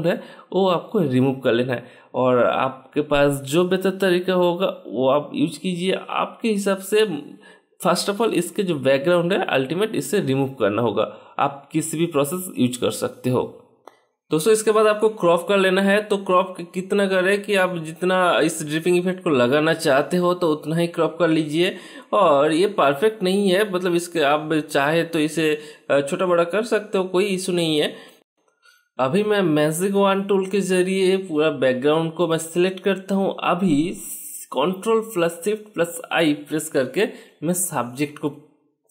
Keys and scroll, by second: 10.4 shift+BackSpace, 11.1 Return, 12.3 ctrl+d, 35.3 ctrl+shift+i.